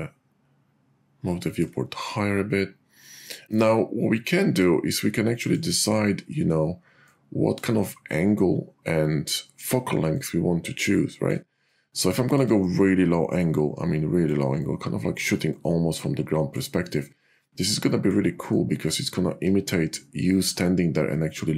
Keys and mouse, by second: 7.0 click, 10.2-11.3 drag, 12.6-14.3 drag, 15.6-16.6 drag, 18.6-20.5 drag.